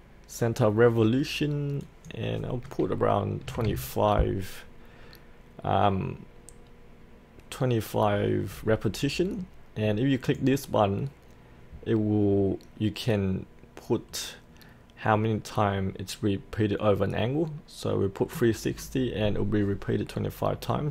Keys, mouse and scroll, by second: 3.4 KP_2, 8.5 Tab, 10.2 click, 14.4-17.9 scroll up 1, 17.9 middle click, 18.7-20.9 scroll down 1.